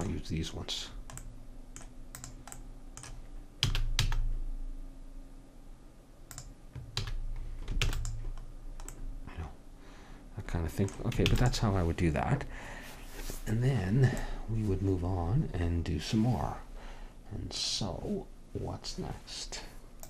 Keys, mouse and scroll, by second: 2.2 click, 3.6 s, 7.0 a, 7.9 ctrl+s, 11.3 ctrl+s.